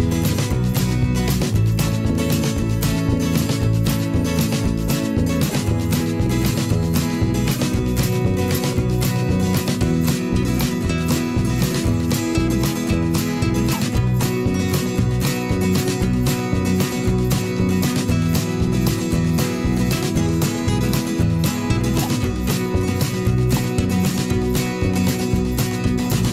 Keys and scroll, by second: 0.9 ctrl+0, 21.5 ctrl+8.